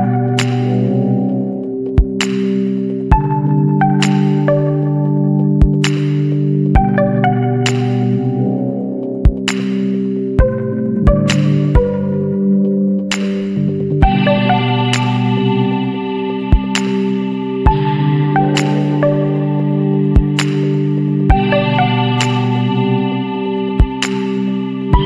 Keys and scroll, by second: 5.3 Return, 11.8 \, 12.0 Return, 24.2 Left.